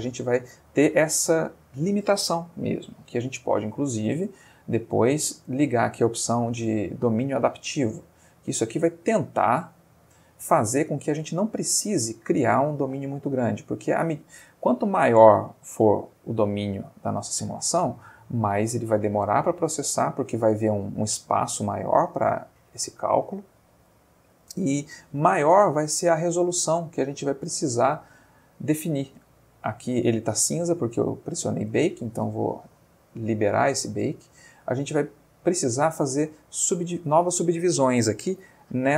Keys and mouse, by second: 0.8-1.5 middle drag, 4.3-5.3 middle drag, 7.4 click, 11.0-11.6 ctrl+middle drag, 13.4 Tab, 14.6 Tab, 15.4 s, 17.4 Escape, 18.9-19.9 middle drag, 20.1 ctrl+middle click, 21.9-24.0 ctrl+middle drag, 24.4-25.1 middle drag, 25.7 middle click, 26.7 middle click, 27.6-28.2 middle drag, 28.7 middle click, 29.9 middle click, 30.7 middle click, 32.5 click, 33.7 middle click, 34.2 middle click.